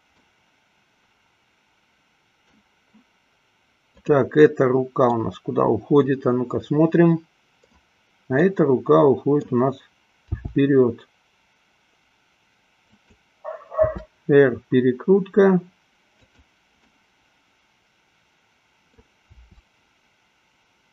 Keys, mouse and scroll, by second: 0.0 click, 0.5-2.7 middle drag, 5.6-8.1 middle drag, 8.6-9.7 middle drag, 10.6 g, 14.1 r, 17.1-19.3 middle drag, 19.7 r.